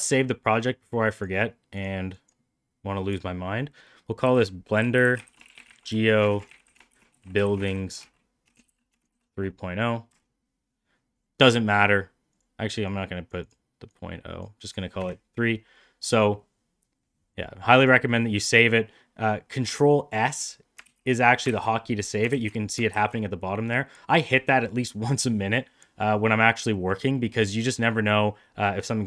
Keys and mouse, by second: 20.8 ctrl+s, 21.6 ctrl+s, 22.2 ctrl+s, 22.8 ctrl+s, 27.1 middle click.